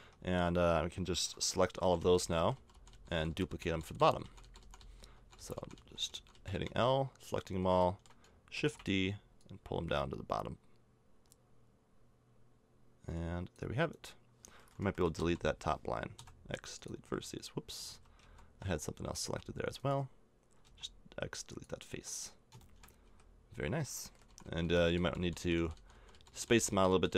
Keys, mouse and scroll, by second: 1.8-6.5 typing, 7.0 middle click, 8.5 shift+d, 13.9-15.1 right drag, 15.1 l, 16.1 x, 17.0 a, 17.8 ctrl+z, 18.2 ctrl+z, 18.8 middle click, 19.2 a, 20.6 x, 21.9 a, 22.5 click, 23.0 a, 24.2-27.1 typing.